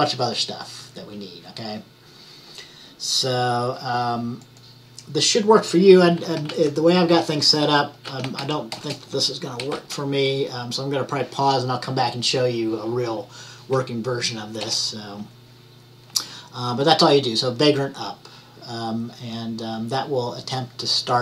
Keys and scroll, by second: 6.3-10.2 typing.